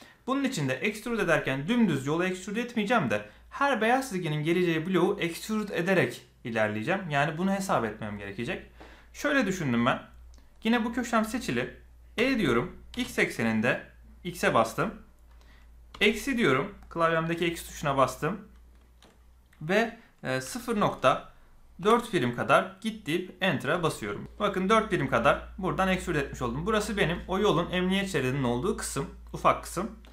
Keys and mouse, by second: 12.1 e.